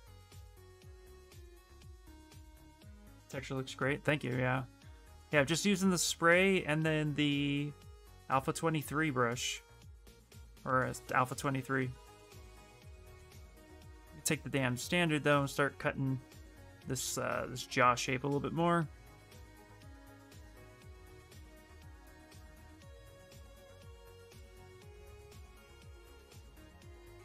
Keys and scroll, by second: 4.8 ., 12.5-13.6 typing, 26.3 b, 27.0 s.